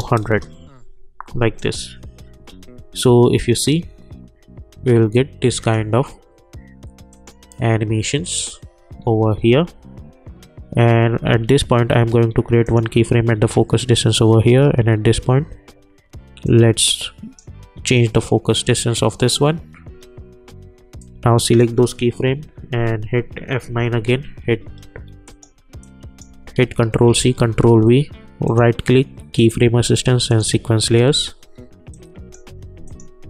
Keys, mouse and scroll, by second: 0.2 Return, 1.6 click, 2.4 k, 5.5 click, 9.0 j, 9.4 j, 12.6 click, 14.5 k, 16.4-19.6 drag, 19.8 k, 21.0-23.6 drag, 23.6 F9, 25.2 click, 26.5 ctrl+c, 27.2 ctrl+v, 28.4 right click, 29.3-33.2 drag.